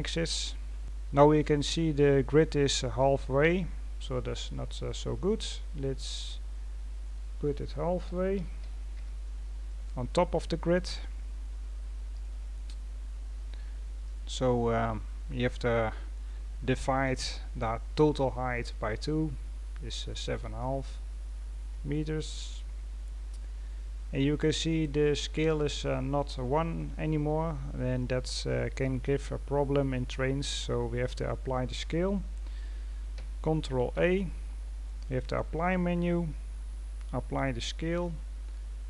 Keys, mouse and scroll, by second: 0.0-38.8 middle drag.